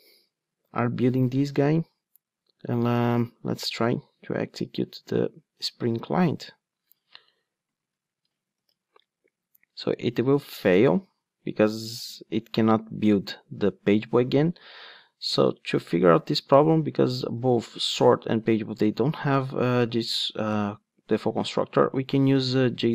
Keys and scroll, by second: 8.5 ctrl+d, 14.5 ctrl+Tab, 15.1 ctrl+Tab.